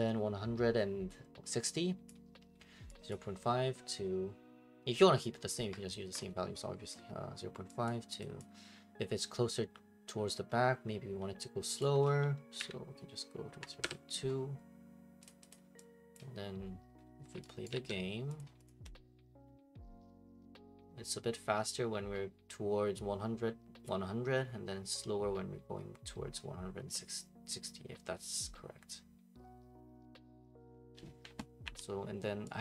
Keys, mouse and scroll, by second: 2.1 click, 3.1 click, 7.8 click, 8.4 click, 11.8 click, 13.3-14.0 typing, 15.2 click, 15.5 click, 16.1 click, 17.6 right click, 17.7 alt+g, 18.4 click, 18.7 click, 31.6 Escape.